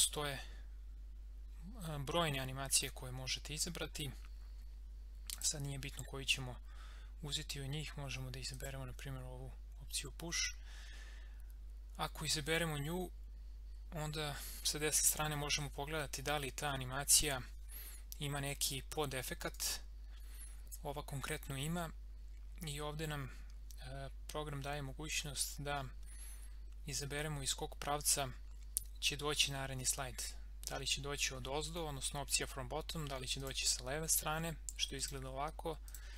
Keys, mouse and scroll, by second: 5.3 click, 8.5 click, 19.5 click, 33.4 click.